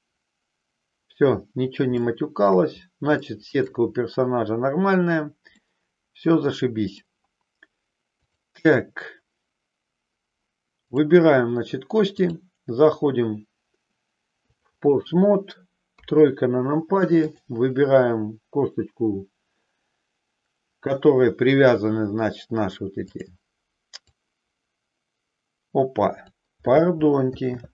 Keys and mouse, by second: 1.9 shift+middle click, 3.1 shift+middle click, 5.5-6.9 middle drag, 10.7 click, 12.1-14.6 drag, 15.9 KP_3, 23.1 click, 24.1-26.3 drag, 27.5 ctrl+z.